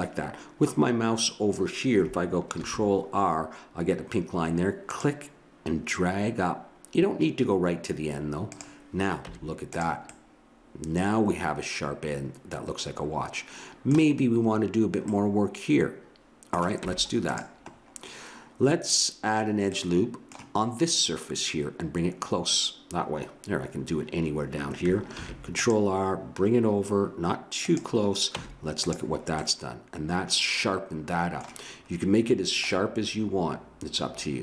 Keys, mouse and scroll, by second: 2.5 ctrl+r, 9.3 Tab, 10.1-13.8 middle drag, 15.1 middle click, 16.8 Tab, 19.8-21.9 middle drag, 25.1 ctrl+r, 28.4 Tab, 29.4 middle click.